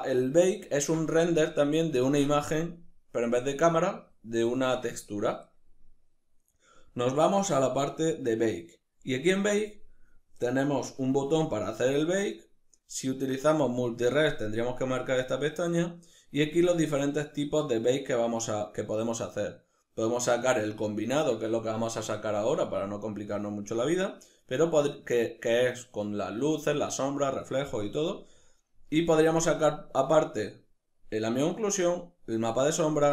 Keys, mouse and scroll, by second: 10.3-16.1 middle drag, 16.1-33.1 drag.